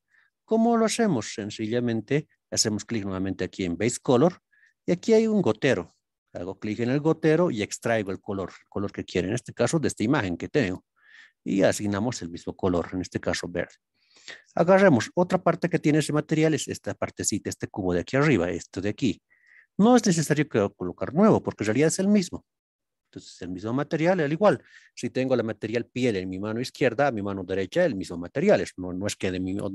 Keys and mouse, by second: 1.5-2.0 shift+middle drag, 3.1 click, 16.4 click.